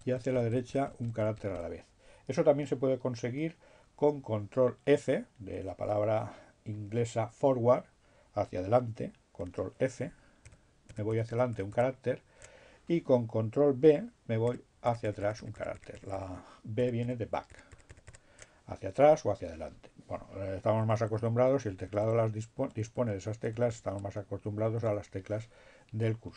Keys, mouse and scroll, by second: 7.9 ctrl+f, 13.1 ctrl+b, 17.0 b, 20.1 Left, 20.6 Right, 22.0 Right, 22.4 Left, 23.6 Right, 23.8 Right, 24.2 Left.